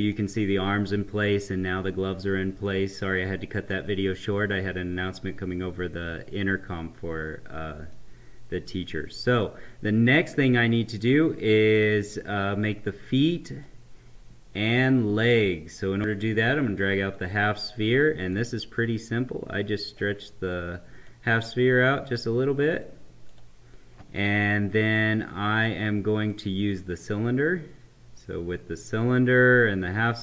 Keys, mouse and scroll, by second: 2.5-6.2 right drag, 7.8-10.4 middle drag, 10.4-11.7 right drag, 11.7-16.1 drag, 17.2-30.2 drag.